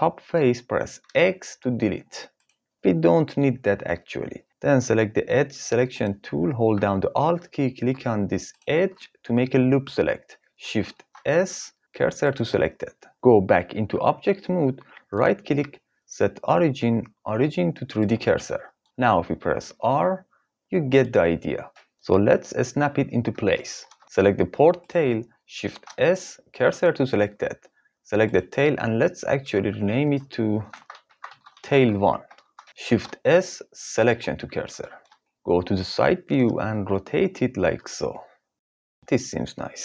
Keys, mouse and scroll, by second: 1.3 x, 8.5 alt+click, 10.9 shift+s, 13.9 Tab, 15.1-18.0 drag, 19.4 r, 21.0 right click, 25.7 shift+s, 29.4 F2, 32.8 shift+s, 35.3 KP_3, 37.2 r, 38.6-39.0 drag.